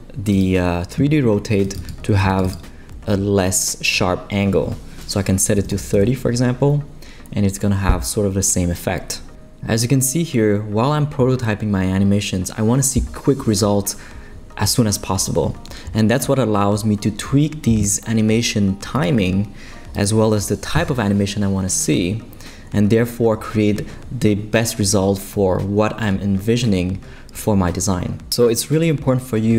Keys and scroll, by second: 5.3-6.2 typing.